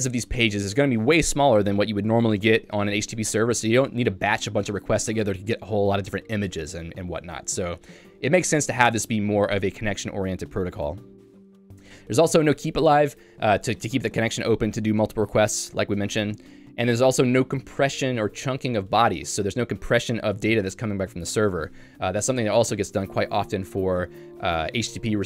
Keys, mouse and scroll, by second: 11.6 j.